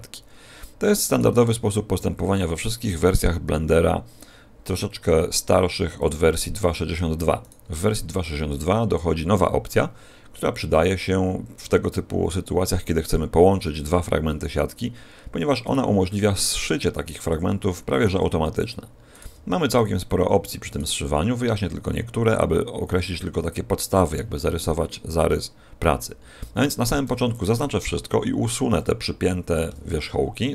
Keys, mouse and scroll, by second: 1.1 right click, 1.5 g, 6.0 click, 7.4 right click, 7.6 g, 8.6 click, 15.6 right click, 15.9 g, 17.2 click, 17.9 right click, 18.0 g, 18.6 click, 19.1 right click, 19.2 g, 19.8 click, 20.8 g, 21.8 click, 24.0 middle click, 25.5 scroll down 2, 26.2-26.7 scroll down 1, 26.7 a, 27.0 a, 29.6 alt+p.